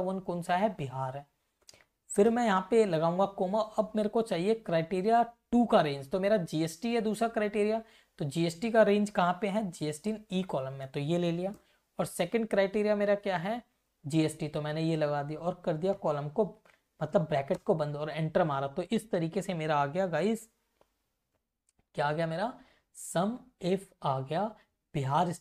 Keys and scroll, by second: 0.0 Left, 0.8 Right, 1.9 ,, 7.1 Left, 9.8 ctrl+shift+Down, 12.0 shift+,, 12.4 Up, 13.3 Down, 14.0 Left, 16.0 shift+0, 18.4 Up, 21.7 F2.